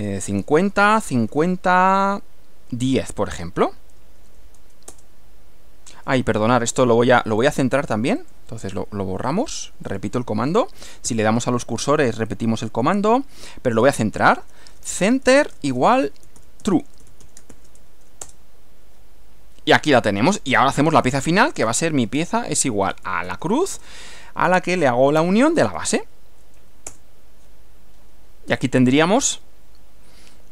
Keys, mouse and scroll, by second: 0.0-2.2 typing, 3.6 shift+9, 5.0 Return, 8.3 click, 9.3 Delete, 9.9 click, 11.1 Up, 11.8 Up, 14.0-18.1 typing, 18.3 Return, 21.1-23.8 typing, 25.3-26.5 typing, 26.9 Return, 28.6 scroll down 2, 28.9-30.5 middle drag.